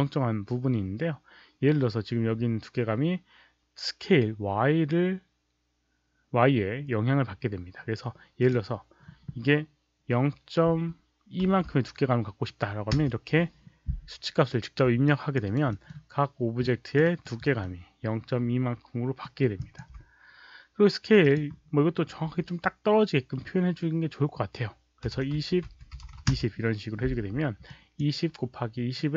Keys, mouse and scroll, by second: 8.3 click, 10.6 KP_Decimal, 11.4 KP_2, 12.9 Return, 15.0 alt+click, 15.0 KP_Decimal, 15.4 alt+right click, 15.5 Return, 15.5 KP_2, 15.5 KP_Decimal, 15.6 alt+middle click, 16.5 alt+click, 16.9 alt+right click, 17.3 alt+middle click, 19.1 alt+middle click, 19.5 alt+click, 21.1 click, 25.0 KP_2, 25.1 KP_0, 25.3 Tab, 25.6 Tab, 25.8 KP_2, 26.2 Return, 27.6 alt+click, 29.0 Return, 29.0 Tab, 29.0 alt+click, 29.0 KP_0, 29.0 KP_2.